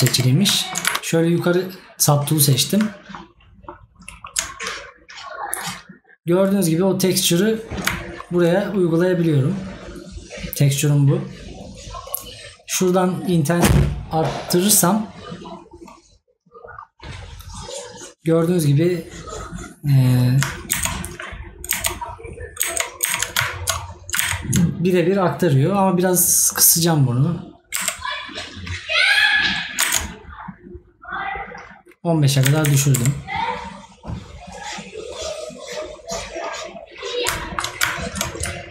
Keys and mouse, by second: 0.6 right click, 2.9 right click, 37.4 right click.